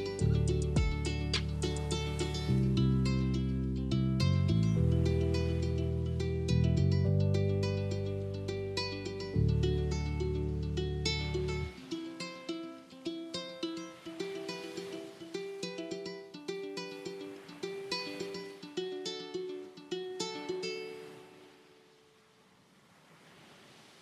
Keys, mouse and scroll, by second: 1.9 shift+a, 3.3 click, 5.0 s, 6.8 click, 8.2-10.0 middle drag, 10.0 click, 11.6 click, 12.8 click, 14.0 click, 15.4 s, 17.5 click, 18.8 click, 21.0-22.8 middle drag, 22.8 click.